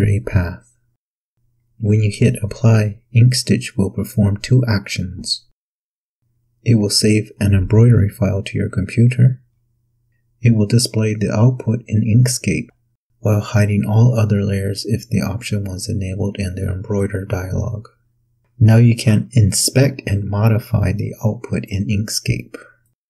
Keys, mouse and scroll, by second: 5.1 click, 11.3 click, 13.1 click, 17.0 click, 17.9 click, 19.1 click, 21.6 click, 22.8 click.